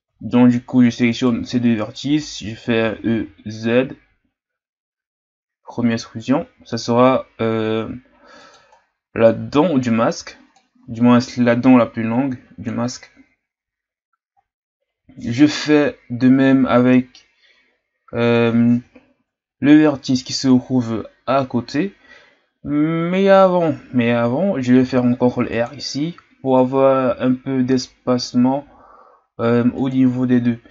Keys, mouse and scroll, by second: 1.1-2.9 right drag, 2.9 e, 8.7-10.5 scroll down 1, 10.5-13.6 drag, 19.8-23.2 shift+scroll up 4, 24.8 ctrl+r, 30.2-30.7 shift+scroll up 4.